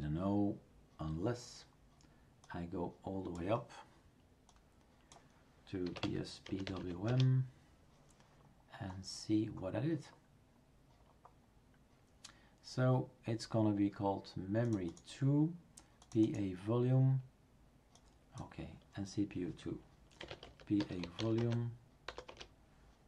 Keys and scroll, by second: 5.6-7.3 typing, 20.0-22.1 typing, 22.3 Return.